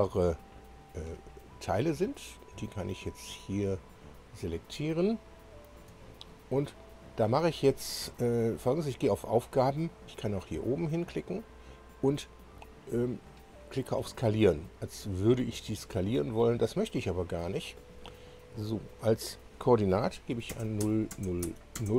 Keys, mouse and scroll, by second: 2.1 ctrl+click, 3.8 ctrl+click, 5.3 ctrl+click, 15.1 click, 20.5 0, 20.8 Tab, 21.4 0, 21.7 Tab, 21.8 0.